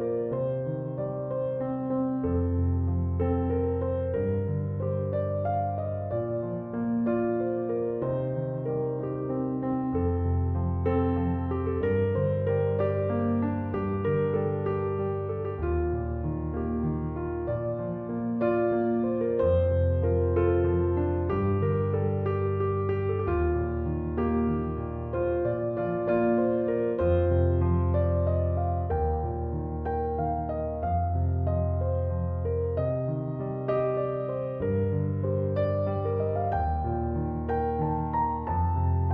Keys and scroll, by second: 11.8 space, 19.0 space.